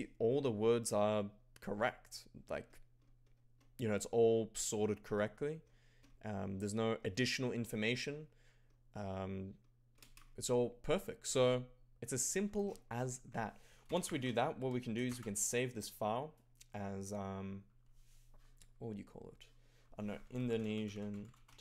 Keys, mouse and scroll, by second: 13.6-15.1 typing, 20.0-21.6 typing.